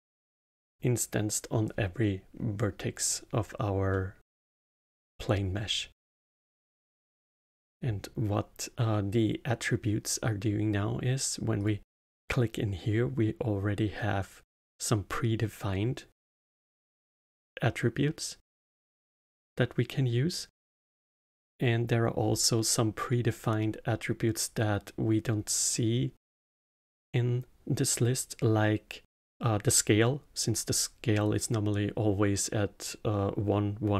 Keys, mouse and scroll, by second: 3.9-9.7 middle drag, 11.5-14.7 drag.